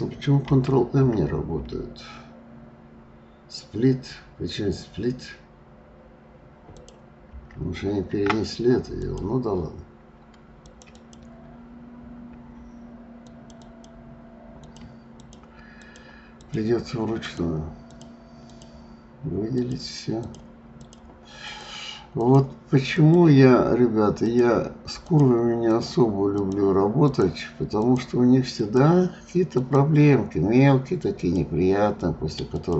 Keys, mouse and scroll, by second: 0.5 alt+m, 0.9 alt+m, 6.7 alt+click, 7.3 alt+m, 9.0 click, 10.6 click, 10.9 click, 13.2 shift+click, 13.6 shift+click, 14.5 shift+click, 15.2 shift+click, 15.8 shift+click, 16.4 shift+click, 17.2 shift+click, 17.8 shift+click, 18.4 shift+click, 19.5 shift+click, 20.2 shift+click, 20.8 shift+click, 21.5 shift+click, 22.1 shift+click, 23.0 shift+click, 24.2 shift+click, 25.1 shift+click, 25.6 shift+click, 26.3 shift+click, 27.0 shift+click, 27.7 shift+click, 28.6 shift+click, 29.5 shift+click, 31.1 shift+click, 32.5 shift+click.